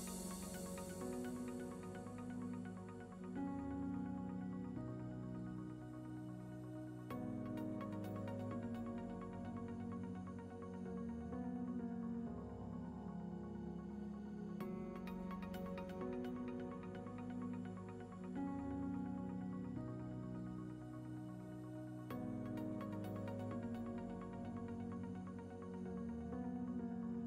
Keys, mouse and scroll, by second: 0.0 ctrl+middle click, 1.2 shift+middle click, 2.2 ctrl+middle click, 5.6 click, 15.6 ctrl+middle click, 16.9 shift+middle click, 17.4 middle click, 18.9 click.